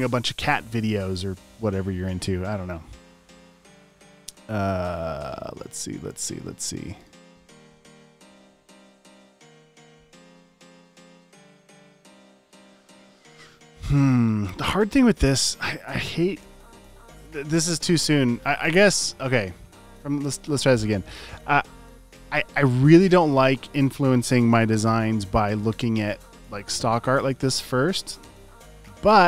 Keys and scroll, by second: 8.1 |.